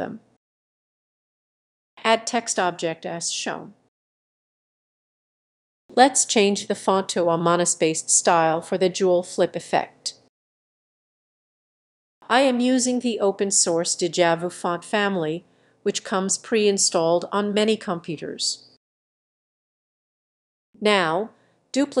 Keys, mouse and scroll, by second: 2.8-3.5 drag, 4.0 click, 5.0 click, 5.1-5.6 scroll up 3, 5.6-12.8 drag, 13.2 click, 13.8-16.6 typing, 18.9-22.0 drag.